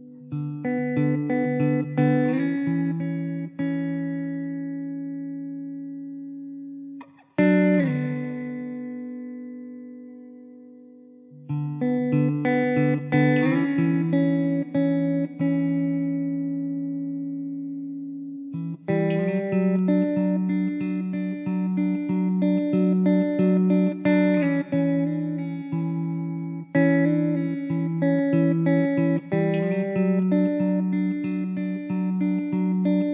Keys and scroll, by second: 1.3 Tab, 2.1 x, 2.3 `, 2.8 alt+z, 6.3 Tab, 6.7 alt+z, 9.9 Tab, 10.4 3, 11.3 l, 12.5 shift+d, 14.0 r, 19.3 alt+z, 23.5 Tab, 23.7 alt+z, 25.1 alt+z, 27.1 Tab, 27.5 1, 28.6 Tab, 29.6 alt+z, 31.2 Tab, 31.7 3, 32.0 l.